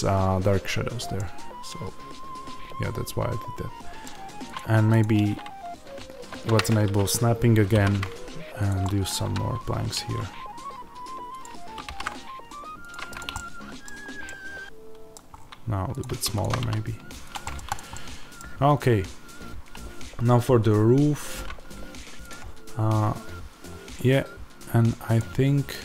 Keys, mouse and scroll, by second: 4.5 click, 6.2 shift+Tab, 7.6 alt+d, 8.6 click, 8.7-11.3 middle drag, 9.2 r, 11.3 click, 11.8 alt+d, 12.8 click, 13.2-15.9 middle drag, 13.7-14.2 scroll down 2, 15.2-15.9 scroll up 2, 15.9 click, 16.5 s, 17.3 middle click, 17.6 click, 17.8 middle click, 18.3-21.6 scroll down 2, 21.6-25.8 scroll down 1.